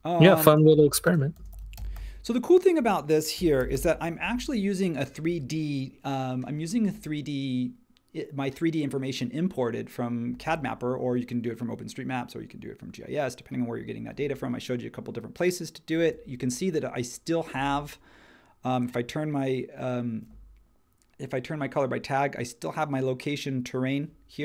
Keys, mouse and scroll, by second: 1.1-4.3 typing.